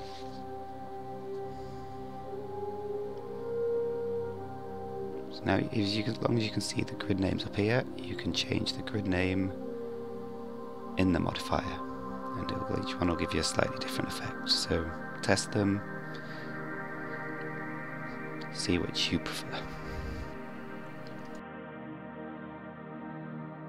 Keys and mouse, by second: 2.9-3.3 middle drag, 7.8 click, 9.1 click, 10.4 click, 13.1 click, 14.6 click, 16.0 click, 16.7 click, 17.3 click, 18.3 click, 19.4 click, 19.9 click, 23.0 click.